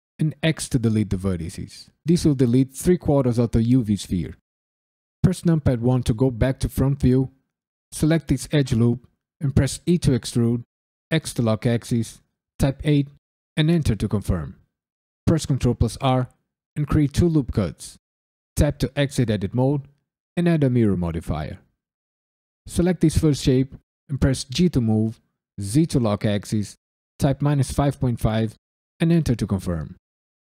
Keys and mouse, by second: 0.4 x, 5.2 KP_1, 7.9 alt+click, 9.8 e, 11.1 x, 12.5 KP_8, 13.5 KP_Enter, 15.2 ctrl+r, 16.7 typing, 17.1 click, 17.9 right click, 18.5 Tab, 19.3-20.7 drag, 22.6 click, 24.5 g, 25.5 z, 27.2 KP_Subtract, 27.6 KP_5, 27.9 KP_Decimal, 28.3 KP_5, 29.0 KP_Enter, 30.0 click.